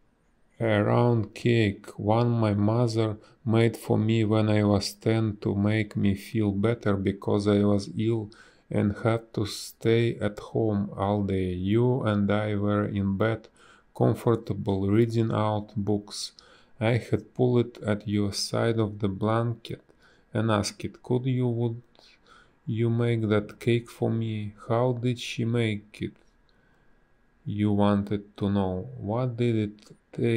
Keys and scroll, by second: 4.5 ctrl+z, 11.0 space, 11.7 a, 14.8 space, 23.1 space, 24.6 space, 25.0 b, 25.9 space.